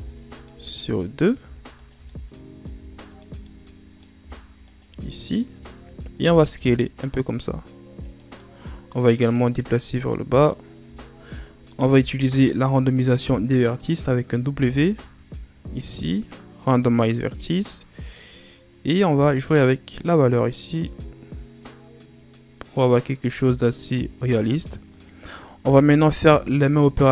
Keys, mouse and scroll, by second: 0.3 shift+right click, 0.6-1.7 middle drag, 1.7 shift+right click, 2.0-3.0 middle drag, 3.0 shift+right click, 3.4-4.6 middle drag, 4.6 shift+right click, 4.9 middle click, 5.7-6.1 scroll down 2, 6.1 s, 8.3-9.8 middle drag, 9.8 click, 10.6-11.3 scroll down 3, 11.3 middle click, 11.8-14.3 scroll down 4, 14.4 w, 17.6-18.9 middle drag, 18.9-22.0 drag, 25.5 a, 25.9 a.